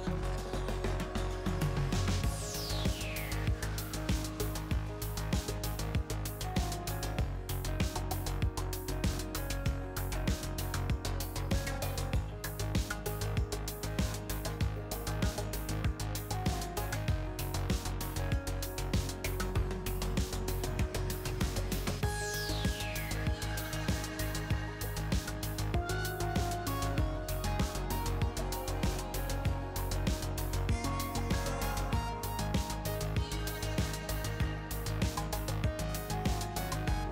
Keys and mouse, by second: 0.5-1.7 middle drag, 2.3-3.5 drag, 5.0-6.0 middle drag, 11.0-13.8 drag, 13.8-16.7 middle drag, 16.7-18.9 drag, 17.7 right click, 19.0 e, 24.2 ctrl+z, 27.6 e, 32.1 ctrl+z, 33.0-35.1 drag, 34.4 e.